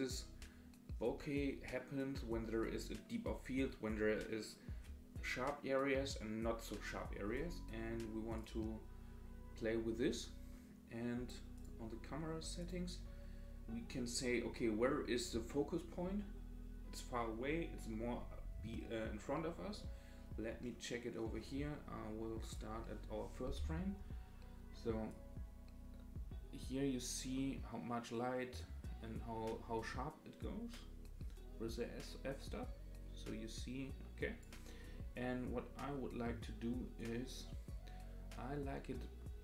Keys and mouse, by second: 8.4 click, 11.6 click, 12.6 click, 25.2-34.4 drag, 37.0-39.4 drag.